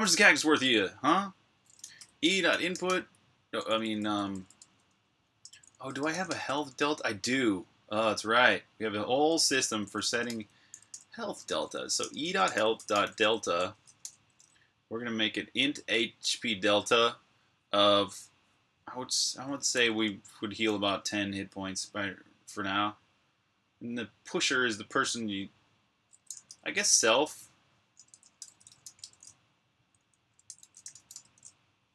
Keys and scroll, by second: 2.0-6.4 typing, 8.0-13.8 typing, 19.1-20.6 typing, 25.9-31.9 typing.